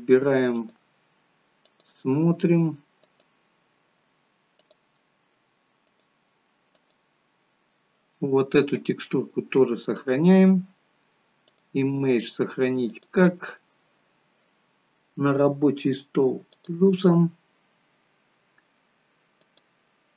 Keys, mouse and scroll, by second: 0.5 click, 4.6 click.